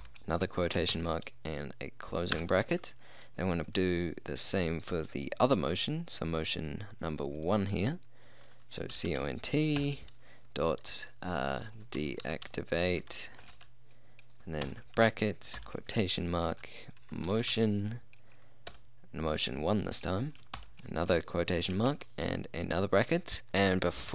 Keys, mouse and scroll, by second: 0.1 shift+', 1.0 shift+0, 2.4 Return, 9.0-9.9 typing, 11.8-13.6 typing, 14.7-18.8 typing, 20.6 shift+', 22.0 shift+0, 23.5 BackSpace.